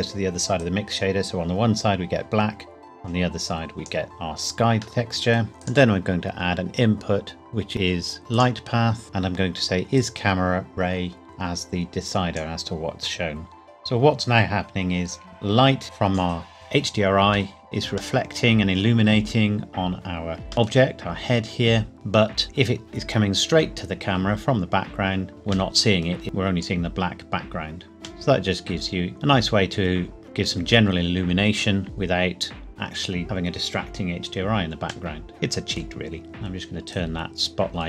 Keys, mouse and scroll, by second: 0.6 click, 5.6 click, 8.3 click, 14.6 scroll up 1, 18.1 middle click, 20.6 middle click, 22.2 scroll down 1, 25.1-25.7 scroll up 1, 25.7 middle click, 26.2 click, 28.2 middle click, 31.7-33.2 scroll up 1, 35.1 middle click, 36.2 click.